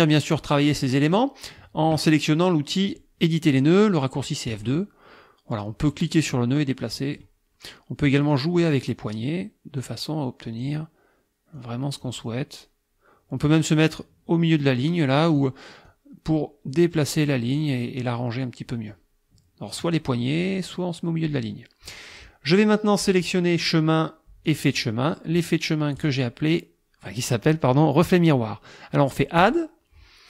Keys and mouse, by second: 4.5 click, 6.3-7.4 drag, 8.1 click, 9.8-10.8 drag, 11.6 click, 14.6-15.6 drag, 15.9-17.5 drag, 18.0-19.1 drag, 19.8 click, 23.2 click, 24.5 click, 26.0 click, 29.4 click.